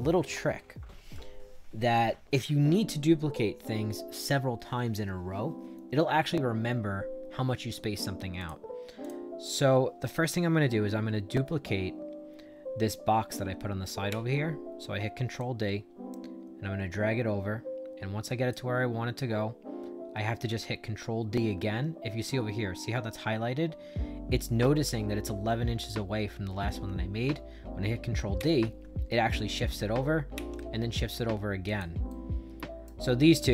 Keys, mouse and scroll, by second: 8.3 click, 8.9 click, 14.0 ctrl+d, 15.3-18.4 drag, 28.3 ctrl+d, 30.2 ctrl+d, 31.6 click, 32.0 right click.